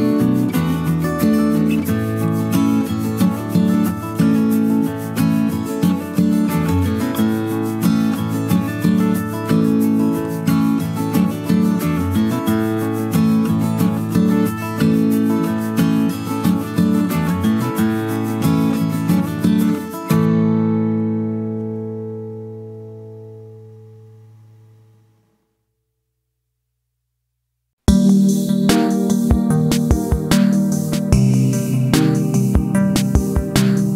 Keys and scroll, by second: 16.2 space, 29.3 space, 32.2 ctrl+c, 32.4 ctrl+v.